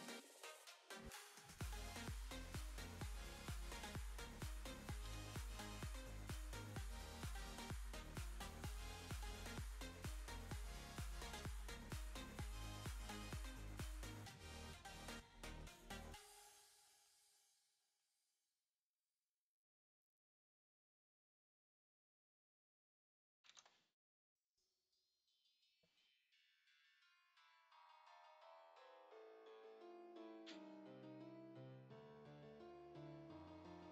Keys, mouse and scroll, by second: 1.1 click, 1.8 click, 3.7 middle click, 25.6 click, 26.0-26.7 scroll up 8, 26.7 click, 27.5 click, 27.7 click, 31.0 shift+middle click, 31.6 middle click, 32.9 click.